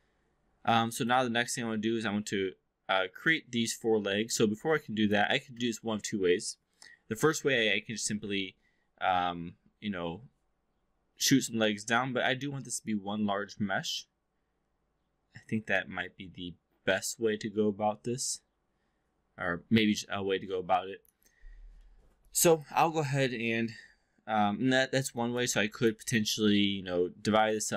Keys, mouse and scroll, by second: 4.4-5.2 alt+drag, 12.9-21.1 alt+drag, 21.7-22.0 alt+middle drag, 22.3 alt+click, 25.2 alt+drag, 25.5 3, 25.7 click.